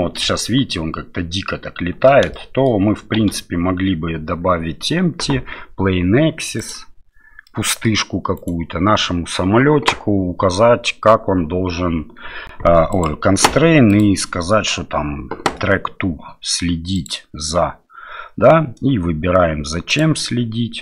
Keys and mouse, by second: 0.2 space, 2.3 middle click, 3.2 shift+a, 7.6 middle click, 8.4 right click, 9.0 middle click, 13.0 click, 14.0-17.0 drag, 19.9 click.